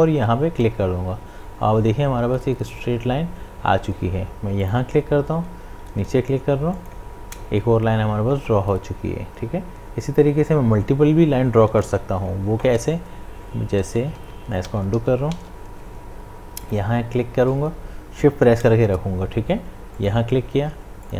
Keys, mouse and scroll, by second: 4.6 click, 6.7 shift+click, 13.9 shift+click, 14.0 ctrl+z, 16.6 click.